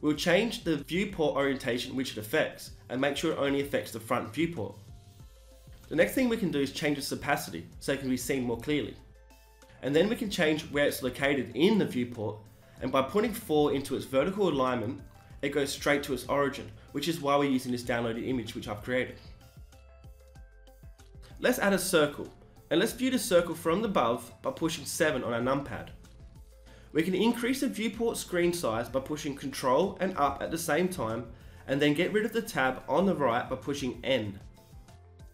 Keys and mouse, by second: 0.0 Return, 4.7-5.1 drag, 5.1 middle click, 5.5-19.6 drag, 19.6-22.7 middle drag, 21.6 shift+a, 24.3 KP_7, 28.6 ctrl+Up, 33.7 n.